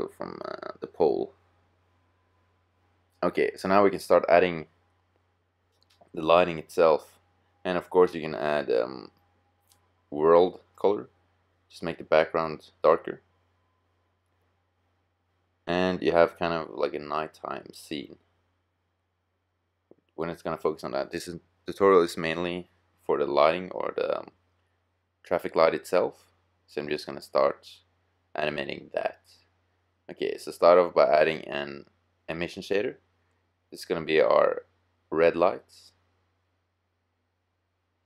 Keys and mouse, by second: 8.7-12.6 drag, 15.9-17.6 middle drag, 21.5-30.5 middle drag, 30.5 click, 33.6-35.3 drag.